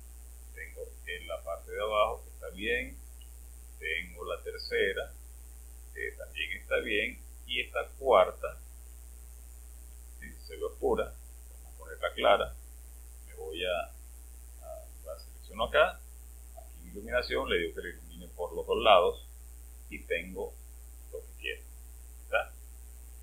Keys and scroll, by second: 0.0 space, 4.3 space, 8.7 space.